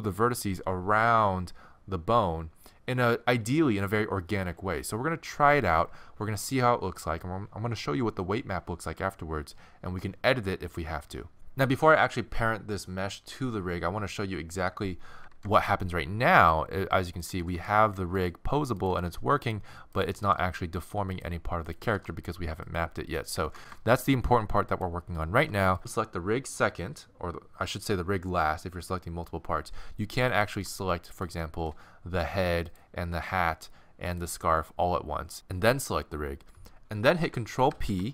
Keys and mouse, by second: 15.2 ctrl+Tab, 15.2-17.4 right drag, 15.4 r, 17.4 r, 18.8 click, 18.9 r, 20.2 r, 21.8 r, 23.4 ctrl+Tab, 24.7 middle click, 25.5 right click, 30.3 right click, 31.4-35.3 middle drag, 37.7 ctrl+p.